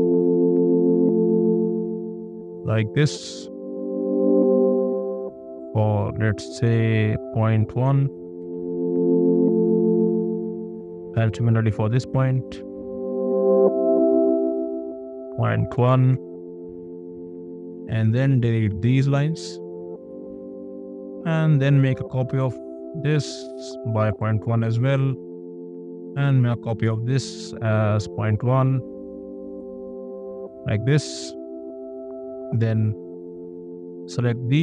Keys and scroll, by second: 7.7 KP_1, 8.4 Return, 10.0 space, 11.6 a, 15.5 ., 15.7 KP_1, 16.1 Return, 17.6 e, 20.3 space, 21.5 m, 23.8 ., 24.1 KP_1, 24.5 Return, 25.4 space, 26.7 m, 29.2 ., 29.5 KP_1, 29.7 Return, 30.2 space.